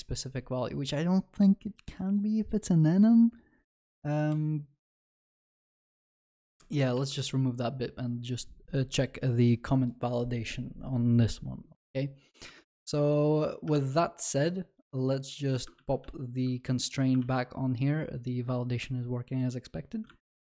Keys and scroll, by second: 4.3 ctrl+b, 6.4 ctrl+alt+Left, 6.9 ctrl+y, 7.0 ctrl+s, 15.8 ctrl+z, 17.2 ctrl+s.